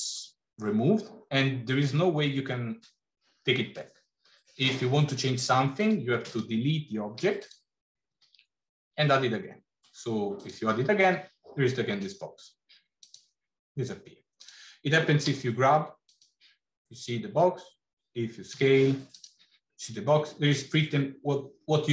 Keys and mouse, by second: 7.0 x, 8.0 shift+a, 12.9 click, 14.2 click, 15.0 g, 18.5 s.